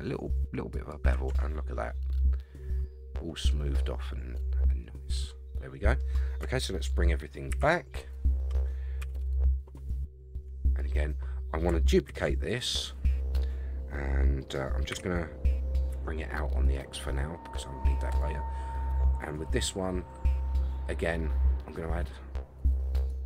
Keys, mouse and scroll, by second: 1.3 Tab, 1.7-6.0 middle drag, 7.5 alt+h, 8.1-8.9 scroll down 4, 9.0 a, 9.1 a, 10.0-10.4 shift+middle drag, 10.7 click, 12.1 shift+d, 13.0-13.7 scroll down 3, 14.9 g, 17.2-17.9 scroll up 5, 18.1 click, 23.1-23.2 drag.